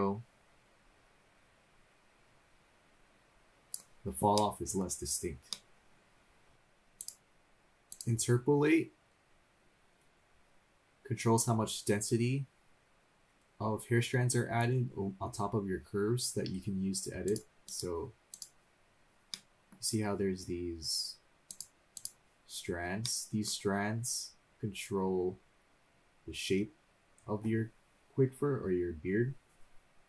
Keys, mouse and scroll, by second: 4.3 middle click, 4.9-5.6 scroll down 2, 5.6 middle click, 6.5 scroll up 2, 7.0 click, 7.9 click, 17.2-17.8 drag, 18.3 click, 19.3 middle click, 21.5 click, 22.0 click, 23.0 middle click, 24.3 scroll up 2.